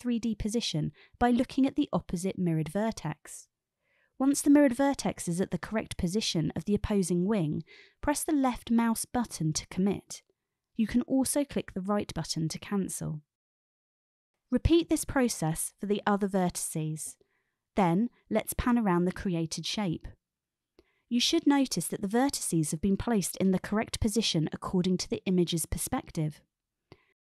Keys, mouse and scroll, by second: 8.2 click, 13.7 alt+y, 14.1 click, 14.3 click, 14.6 alt+y, 16.0 alt+y, 16.9 alt+y, 18.5-24.4 middle drag, 25.5-26.5 middle drag, 27.0-27.2 middle drag.